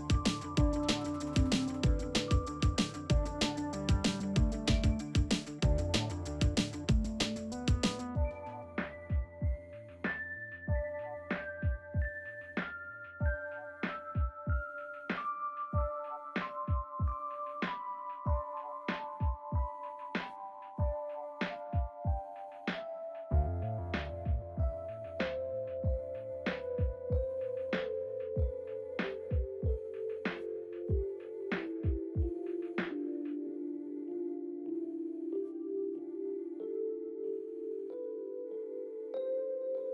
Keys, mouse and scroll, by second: 1.4-2.3 drag, 8.2 space, 13.2 scroll up 1, 15.3 click, 18.8 click, 20.1-20.7 scroll down 1, 22.3 scroll down 1, 22.9-24.0 scroll up 1, 25.2 ctrl+z, 27.7 click, 31.6 click, 34.2-35.8 drag, 36.3-37.4 scroll down 1, 39.2 click.